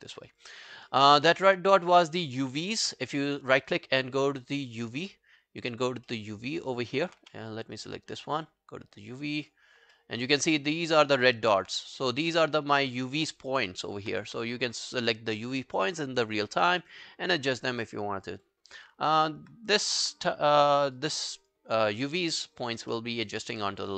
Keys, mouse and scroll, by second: 0.0 alt+middle click, 0.2 alt+right click, 0.4 alt+click, 0.7 alt+middle click, 0.9 alt+right click, 1.3 alt+middle click, 2.0 scroll down 1, 2.2 alt+middle click, 2.5 alt+right click, 3.0 right click, 6.1 alt+middle click, 6.6 alt+click, 6.9 alt+middle click, 7.2 w, 7.8 right click, 10.0 alt+middle click, 10.2 alt+right click, 10.9 alt+scroll down 1, 11.1 alt+middle click, 11.4 alt+right click, 12.8 alt+middle click, 14.3 alt+middle click, 14.5 right click, 14.5 w, 17.7 alt+middle click, 18.1 alt+scroll down 1, 18.3 alt+click, 21.2 alt+middle click, 21.4 alt+right click, 22.1 alt+middle click, 22.3 alt+right click, 22.5 alt+click, 22.9 alt+middle click, 23.3 alt+scroll down 1, 23.5 alt+click, 23.9 alt+middle click.